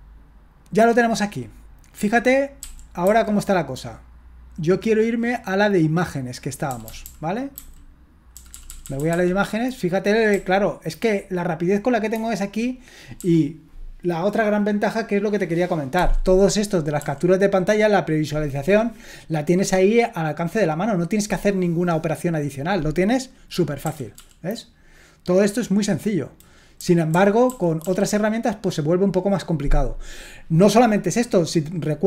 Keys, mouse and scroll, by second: 2.0 Down, 2.6 Up, 3.0 Left, 6.7 Down, 6.8 Down, 7.0 Down, 7.6 Left, 8.3 Down, 8.5 Down, 8.7 Down, 8.8 Down, 9.0 Down, 9.1 Down, 9.2 Down, 10.3 Right, 12.1 j, 13.1 typing, 15.9 typing, 17.0 typing, 23.8 Down, 24.1 typing, 26.8 Down, 27.1-27.4 typing, 27.8 Down.